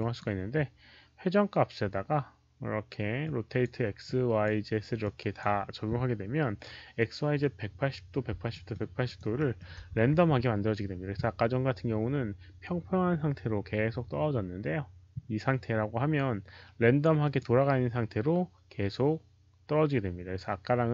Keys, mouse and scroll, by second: 3.1 click, 3.9 click, 4.9 click, 8.0 click, 8.4 alt+middle click, 8.9 alt+right click, 9.3 alt+middle click, 9.9 q, 12.9 alt+middle click, 12.9 alt+right click, 12.9 click, 12.9 q, 17.1 click, 17.1 alt+middle click, 17.3 alt+middle click, 17.3 alt+right click, 17.3 q.